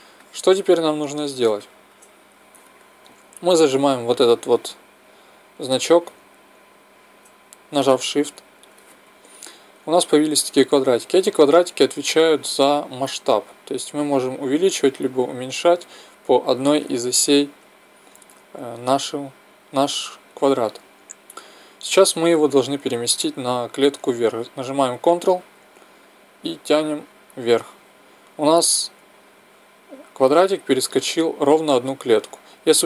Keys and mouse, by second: 8.3-16.8 drag, 18.8 ctrl+z, 26.0-27.9 drag.